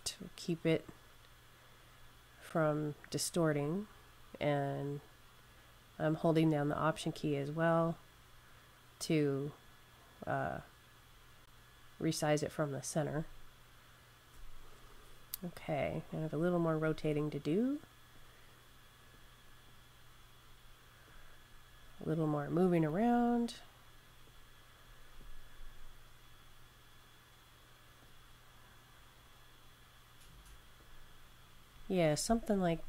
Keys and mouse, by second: 15.7 click, 22.7 click, 27.9 click, 32.5 Left.